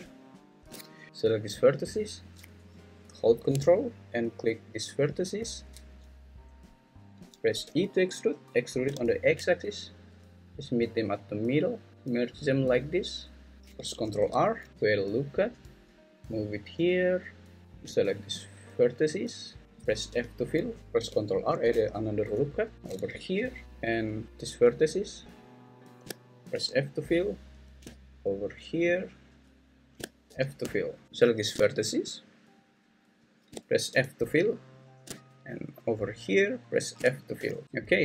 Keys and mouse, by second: 5.3 ctrl+click, 7.6 e, 8.9 x, 14.0 ctrl+r, 18.2-19.6 shift+drag, 20.1 f, 21.5 ctrl+r, 23.6 Escape, 23.6 `, 26.5 f, 30.3 f, 33.9 f, 37.3 f.